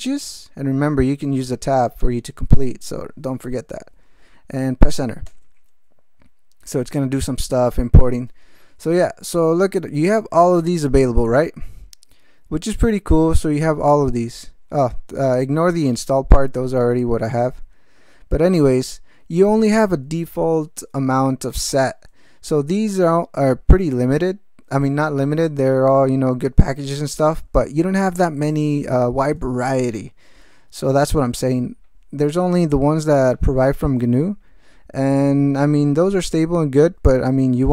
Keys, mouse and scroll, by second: 5.2 Return, 12.1 ctrl+v, 15.0 ctrl+alt+v, 16.3 alt+v, 17.6 alt+v, 20.1 ctrl+p, 21.6 ctrl+space, 21.8 ctrl+n, 28.1 ctrl+g, 28.8 ctrl+alt+shift+,.